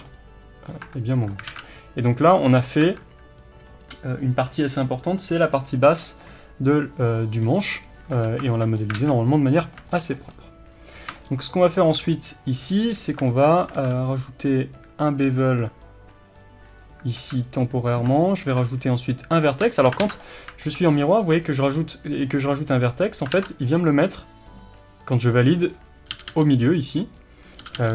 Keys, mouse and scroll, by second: 0.1 middle click, 0.8 Tab, 1.0 middle click, 1.5 alt+a, 1.7 middle click, 2.6 scroll up 1, 2.8 Tab, 5.2 middle click, 7.4 scroll down 1, 7.6 middle click, 8.1 Tab, 8.1-13.4 middle drag, 8.8 scroll up 1, 9.0 alt+a, 10.3-11.2 scroll up 1, 12.5 scroll up 1, 13.4 alt+click, 13.8 ctrl+b, 17.2 alt+a, 17.4 scroll down 1, 17.6-18.6 middle drag, 18.4 ctrl+r, 18.6 click, 19.7-25.8 shift+middle drag, 20.1 ctrl+z, 20.3-20.6 scroll up 1, 22.4-22.8 scroll down 1, 22.8-23.4 scroll up 1, 23.4 ctrl+r, 25.8 click, 26.2 g.